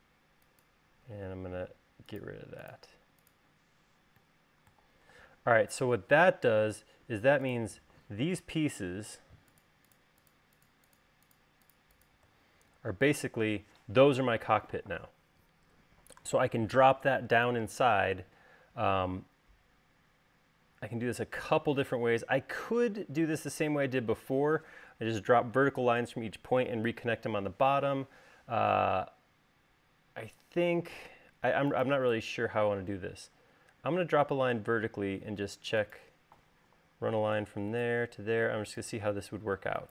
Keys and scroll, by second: 0.1 space, 5.8 space, 31.2 l.